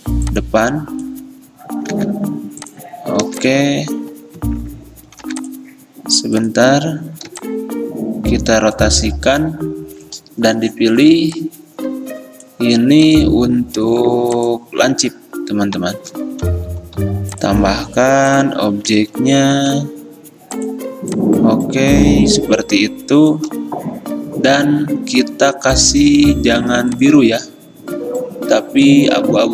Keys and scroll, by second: 2.0 v, 3.3 r, 4.5 ctrl+z, 5.3 v, 7.4 r, 16.9 p, 19.6 a.